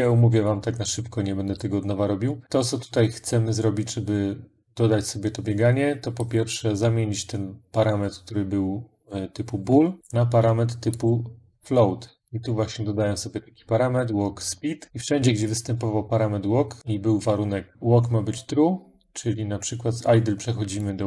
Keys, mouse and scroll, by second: 1.3 click, 2.4 click, 6.3 middle click, 10.0 click, 10.8 click, 12.1 click, 15.0 middle click, 15.5 middle click, 16.8 click, 20.7 click.